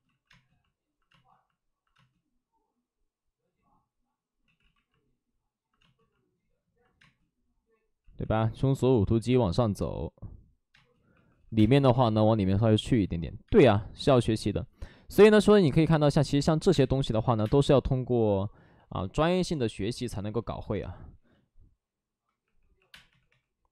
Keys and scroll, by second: 0.0 ctrl+z, 4.3 space, 4.4 ctrl+z, 5.7 space, 6.9 space, 8.0 ctrl+z, 10.6 space, 11.0 2, 11.5 space, 11.5 2, 16.6-17.3 typing, 22.3 3, 22.8 space, 23.0 3.